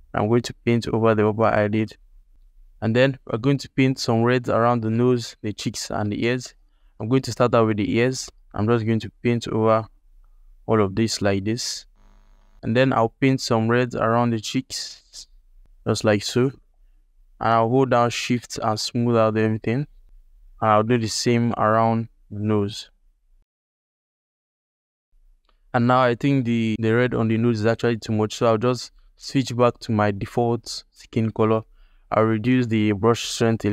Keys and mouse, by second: 5.9 alt+click, 6.3 shift+click, 6.7 ctrl+alt+click, 7.2 f, 8.0 f, 8.5-11.7 drag, 11.9 alt+middle click, 12.0 /, 12.3 shift+click, 12.5 f, 13.0-15.9 drag, 16.2 click, 16.7-20.0 shift+drag, 20.2 middle click, 20.8 ctrl+alt+click, 20.8 alt+middle click, 21.0 f, 21.3 f, 21.4-22.6 drag, 22.8 alt+click, 23.4 click, 23.4 f, 28.6 x, 29.4 alt+click, 30.7 shift+f, 33.0 f.